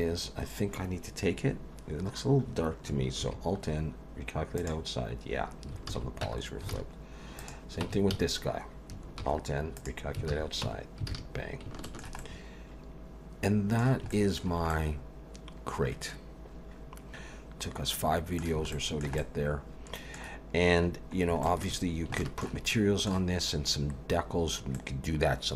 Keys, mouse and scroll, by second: 3.2 alt+n, 5.9 alt+a, 6.2 Tab, 6.7 alt+a, 7.4 click, 7.8 Tab, 8.1 a, 9.2 alt+n, 10.3 alt+a, 10.6 Tab, 11.1 alt+a, 11.8 shift+middle click, 12.2 middle click, 14.1 shift+middle click, 14.7 middle click, 18.7 shift+middle click, 19.2 middle click, 21.4 shift+middle click, 21.8-22.1 scroll down 2, 22.2 shift+middle click, 22.7 middle click, 23.4 scroll up 1, 24.7 middle click.